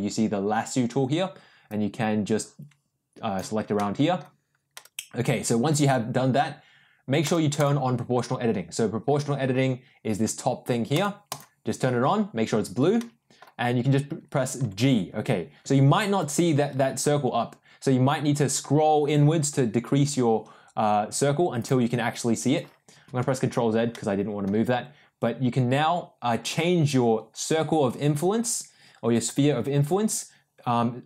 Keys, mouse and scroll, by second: 1.6-3.3 drag, 3.7 middle click, 4.7 middle click, 7.2 click, 7.5 click, 10.9 click, 11.2 click, 12.9 middle click, 14.6 g, 23.0 ctrl+z, 23.9 middle click, 24.7 g.